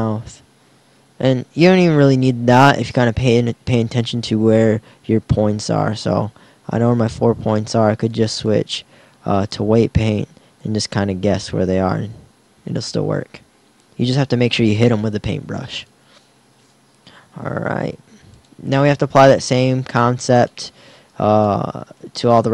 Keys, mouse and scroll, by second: 8.1 click, 11.9 r, 17.8 r.